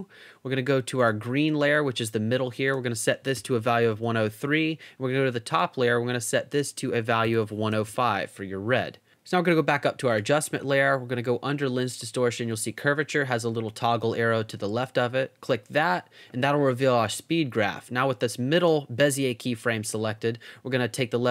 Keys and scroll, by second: 3.1-4.3 typing, 7.0-8.2 typing.